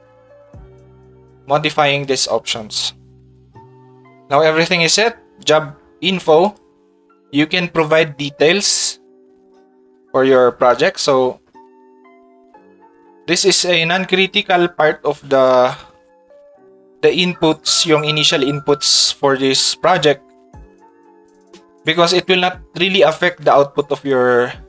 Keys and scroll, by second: 13.1 ctrl+Tab.